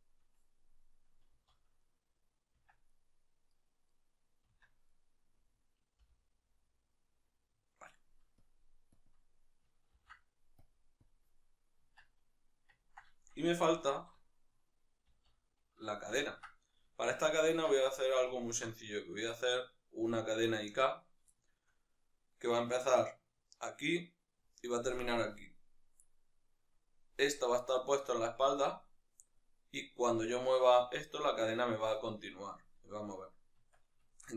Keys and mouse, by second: 1.2 middle click, 1.2 z, 1.6-2.5 right drag, 2.5 Tab, 2.6 right click, 4.4 Tab, 4.6-5.7 right drag, 5.7 l, 6.6-8.2 middle drag, 8.2 click, 8.8-10.4 drag, 10.9-12.5 drag, 11.7 Tab, 12.5-32.8 ctrl+middle drag, 13.8 alt+q, 15.0 z, 32.8-33.5 right drag, 33.5 Tab, 33.8-34.3 shift+middle drag.